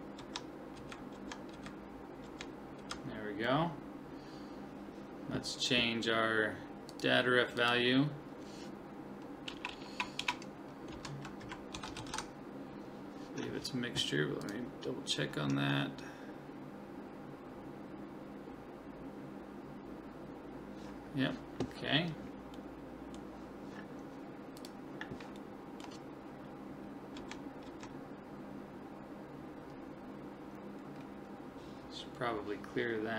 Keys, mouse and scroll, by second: 0.2 Left, 0.8 Right, 1.1 Left, 1.5 Right, 2.3 Left, 2.8 Right, 6.9 click, 9.7 BackSpace, 10.2 BackSpace, 25.4-27.4 middle drag, 27.2 Left, 27.7 Left.